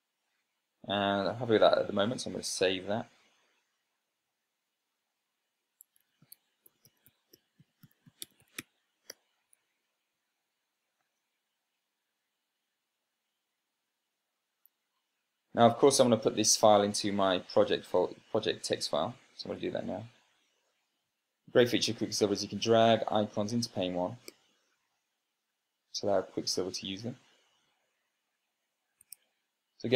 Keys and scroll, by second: 3.4 super+s, 6.5-9.9 typing, 11.9 space, 20.6 super+space.